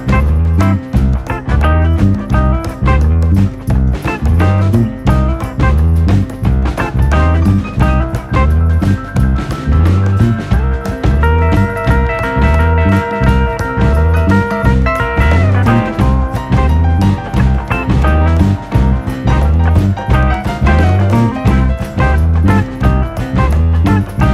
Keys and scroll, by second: 13.3 u, 20.2 ctrl+d, 20.9 ctrl+], 21.2 ctrl+[, 22.9 u.